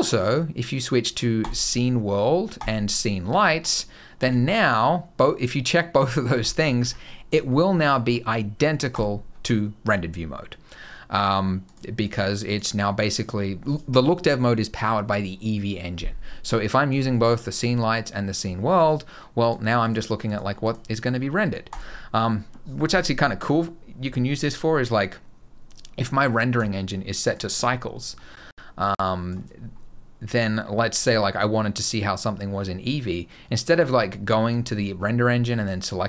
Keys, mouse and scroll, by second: 3.0-4.0 scroll down 6, 4.0 g, 6.3 middle click, 6.6 g, 7.4 middle click, 7.6-8.8 scroll up 3, 8.8 click, 8.8-9.3 scroll up 1, 11.5 click, 11.9 click, 12.3 click, 12.9 click, 16.7 click, 19.2 click, 19.7 click, 20.1 click, 20.5 click, 21.5 click, 26.4 click, 28.1 middle click, 29.3 click, 29.4 scroll up 2, 30.2-30.9 scroll up 1, 32.3-33.1 scroll down 1, 34.5 click.